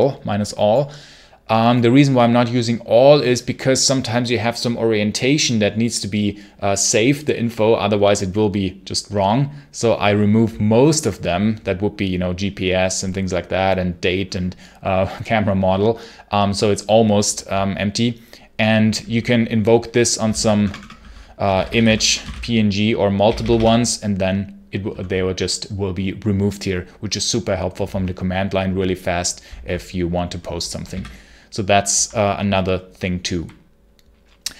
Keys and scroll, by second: 19.8-22.6 typing, 30.8 ctrl+c.